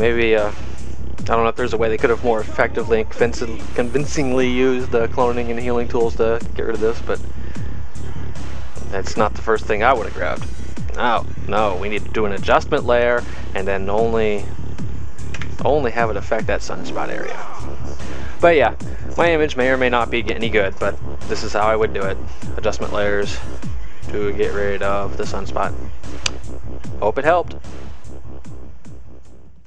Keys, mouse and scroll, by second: 24.9 click.